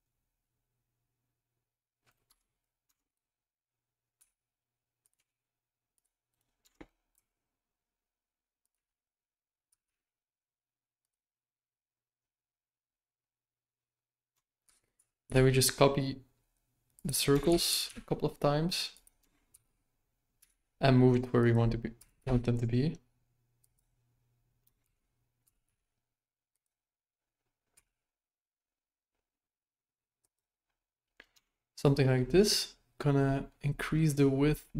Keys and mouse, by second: 2.8 Tab, 3.0 right click, 4.2 s, 5.2 g, 6.3 right click, 6.6 Tab, 7.1 s, 8.7 x, 9.6 s, 14.6 shift+d, 17.5 shift+d, 19.5 shift+d, 22.0 s, 24.8 shift+d, 27.7 s, 31.3 Tab, 31.8 right click.